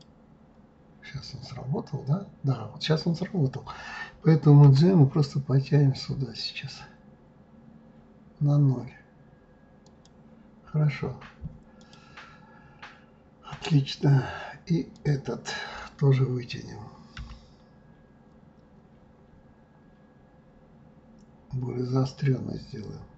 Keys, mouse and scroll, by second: 0.8-3.2 scroll down 2, 4.7 g, 11.8 click, 12.2-13.9 scroll down 5, 14.9 click, 17.2 g.